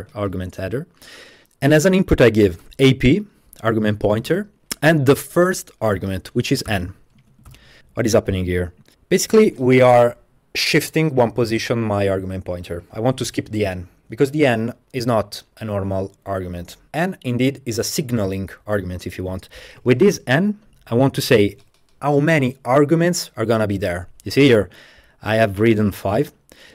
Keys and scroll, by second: 0.7 Left, 2.3-3.1 typing, 4.3 typing, 6.7 n, 7.2 Tab, 7.5 shift+,, 7.5 shift+., 7.8 BackSpace.